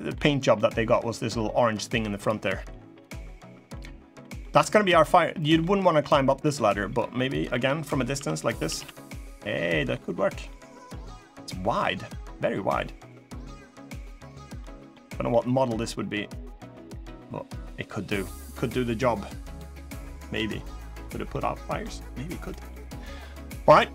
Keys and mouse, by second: 0.3 middle click, 1.6 middle click, 2.7 click, 3.4 middle click, 4.1-5.3 middle drag, 6.1 middle click, 7.1 click, 7.3 Tab, 7.9 Tab, 8.3 a, 8.5 a, 9.4 middle click, 10.2-12.1 middle drag, 12.5-13.9 middle drag, 14.3 middle click, 15.0-18.2 middle drag, 19.2 click, 19.5-20.7 middle drag, 21.0 middle click, 22.2 middle click.